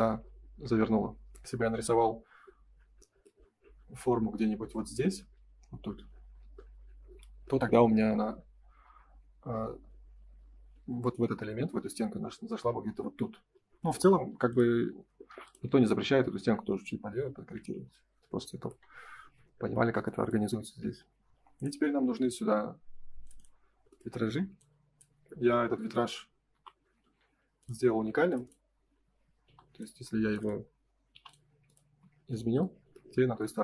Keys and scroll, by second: 11.6 ctrl+s, 15.2 m, 16.8 space, 17.5 ctrl+s, 20.6 ctrl+s, 26.5 Delete, 27.3 Escape, 29.9 space, 31.8 space, 31.9 Escape.